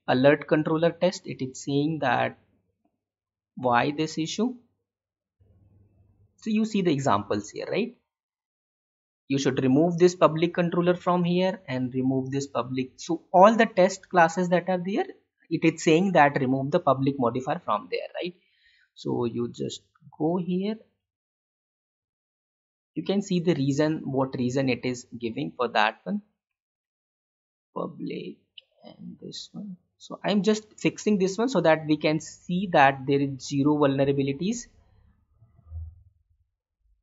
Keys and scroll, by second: 18.7 alt+Tab, 26.4 Delete, 32.5 Delete.